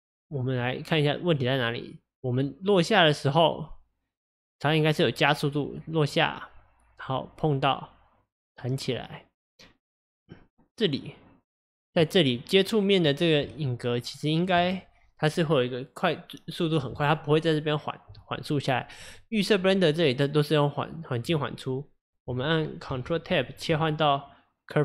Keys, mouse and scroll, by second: 1.4-4.5 drag, 12.3-24.8 drag.